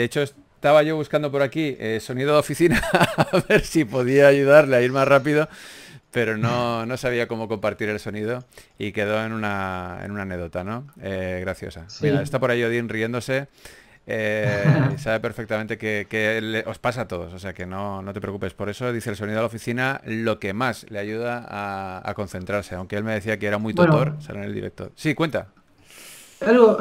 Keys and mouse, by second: 1.3 g, 1.5 f, 2.3 f, 8.2 f, 14.2 f, 26.1 f.